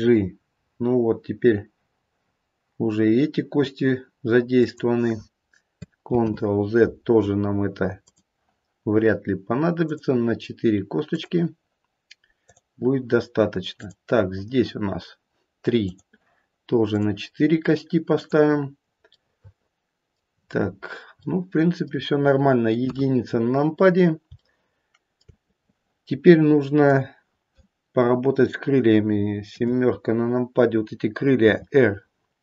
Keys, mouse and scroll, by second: 6.1 ctrl+z, 8.0 click, 9.8 click, 16.9 click, 19.1 middle click, 21.2 middle click, 22.8 KP_1, 23.6-24.2 scroll down 1, 24.4 shift+middle click, 25.0 shift+middle click, 26.8 click, 29.4 KP_7, 31.3 r.